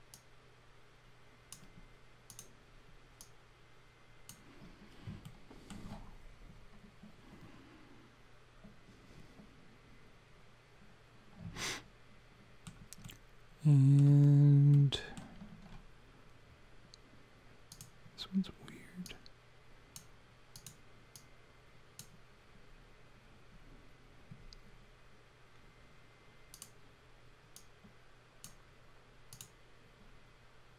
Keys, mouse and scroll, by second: 0.1 click, 2.3 click, 3.2 click, 5.3 alt+middle click, 11.6 alt+middle click, 13.1 alt+middle click, 14.7 alt+middle click, 17.7 click, 19.1 click, 20.5 click, 21.1 click, 26.6 click, 27.6 click, 29.3 click.